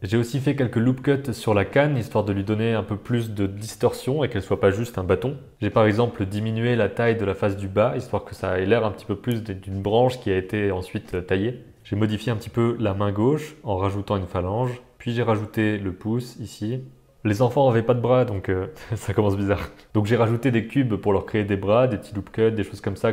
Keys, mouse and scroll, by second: 0.1 ctrl+r, 0.6 middle click, 0.9 g, 1.1 g, 1.5 middle click, 1.7 g, 2.9 ctrl+r, 3.4-5.5 typing, 3.9 middle click, 5.2 middle click, 5.3 click, 6.2 click, 6.6 s, 7.1 Tab, 7.7 middle click, 8.3 shift+middle click, 8.6 middle click, 9.1 Tab, 9.3 Tab, 9.5 g, 9.8 g, 10.5 middle click, 10.7 click, 10.8 Tab, 11.1 g, 11.9 click, 12.4 e, 13.6 s, 14.1 r, 14.5 g, 14.9 Tab, 15.2 alt+a, 15.3 shift+click, 16.2 shift+middle click, 17.7 ctrl+r, 18.6 super+z, 21.0 shift+middle click, 21.0 g, 21.1 middle click, 21.1 Tab, 21.3 ctrl+r, 21.5 shift+middle click, 21.9 middle click.